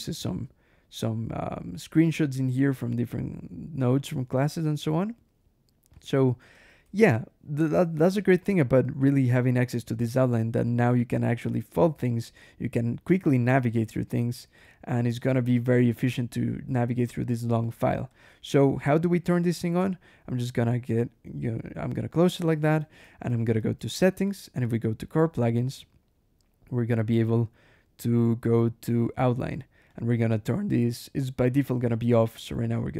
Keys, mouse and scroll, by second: 1.8-2.2 scroll down 1, 3.0-3.6 scroll down 1, 4.2 ctrl+e, 4.9-5.5 scroll up 1, 5.8 click, 6.1 Escape, 6.4 g, 6.7 Escape, 6.9 j, 8.2-8.5 scroll up 1, 9.9 click, 10.4 click, 11.9 click, 14.4 click, 15.1 click, 15.7 click, 16.4 scroll down 1, 17.5 click, 18.0 click, 20.1 right click, 20.9 click, 22.6 ctrl+shift+h, 24.9 click, 25.6-26.0 scroll down 1, 26.3-26.7 scroll down 1, 27.0-27.4 scroll down 1, 27.9 scroll down 1, 28.5 scroll down 1, 29.7 click, 32.2 click.